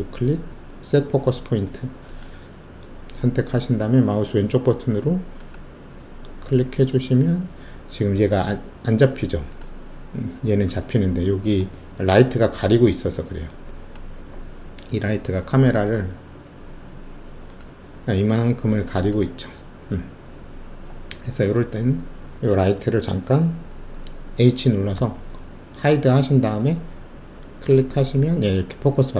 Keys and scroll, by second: 24.9 h.